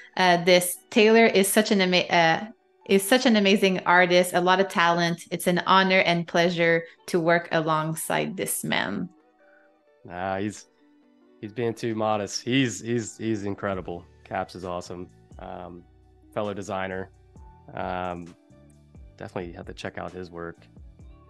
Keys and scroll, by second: 3.7 a, 7.0 -, 8.2 a, 9.7 -, 10.6 a, 15.7 space, 18.6 -.